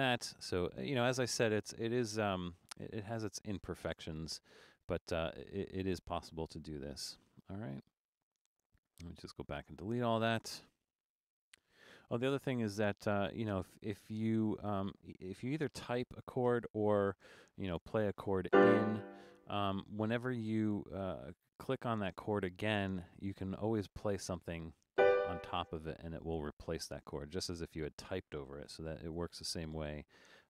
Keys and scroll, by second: 8.7 BackSpace, 9.3 BackSpace, 16.1 shift+d, 16.4 space, 28.8-30.4 typing.